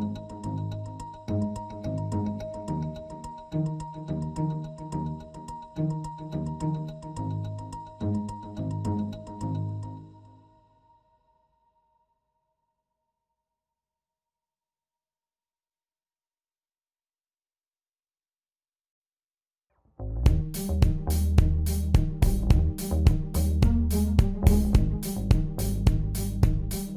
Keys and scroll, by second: 14.4 p.